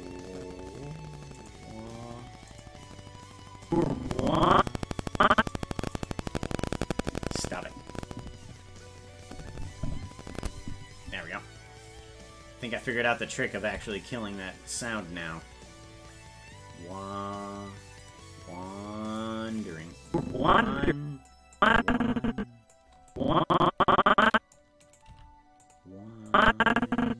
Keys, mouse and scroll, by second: 1.4 click, 2.5 click, 3.7-5.5 drag, 6.0-8.7 right drag, 12.8-13.8 right drag, 13.8 g, 18.0 click, 19.1 click, 20.1-21.3 drag, 21.6-22.7 drag, 23.1-24.5 drag, 24.8 right click, 25.1 g, 26.3-27.1 drag.